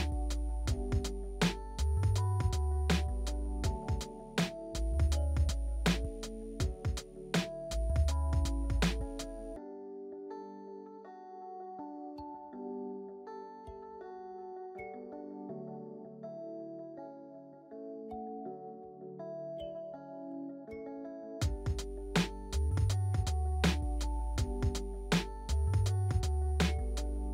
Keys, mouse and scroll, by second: 8.9 alt+middle click, 9.7 e, 9.9 middle click, 14.8 z, 15.9 w, 18.3-22.5 drag, 20.5 e, 22.6 middle click, 24.1-27.3 alt+drag, 24.1 alt+middle click.